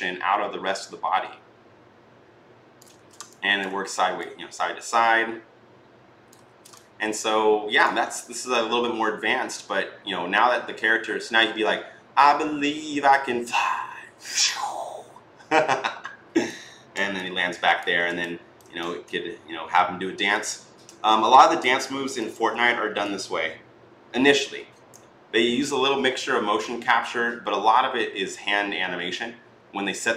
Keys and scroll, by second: 2.8 ctrl+z, 6.2 ctrl+z.